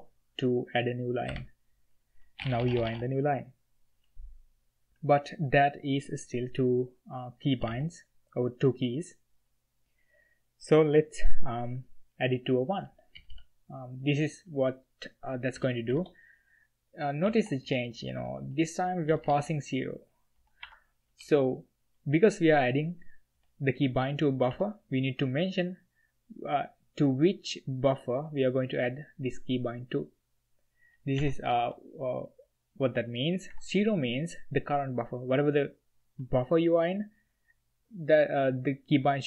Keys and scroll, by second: 1.3 o, 2.4-2.9 typing, 7.6 j, 7.8 k, 13.1 d, 13.3 d, 15.5 shift+v, 17.2-19.4 typing, 20.6 Escape, 21.2 h, 21.3 h, 23.3 b, 24.5 l, 31.2 v, 31.5 l, 31.6 l, 33.5 Escape.